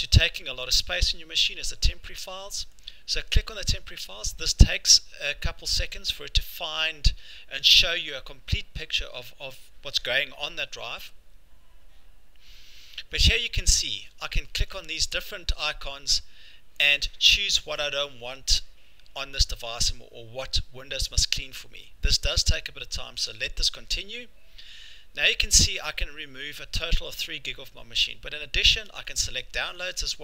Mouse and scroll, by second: 2.9 click, 14.7 click, 15.7 click, 29.2 click, 29.8 click.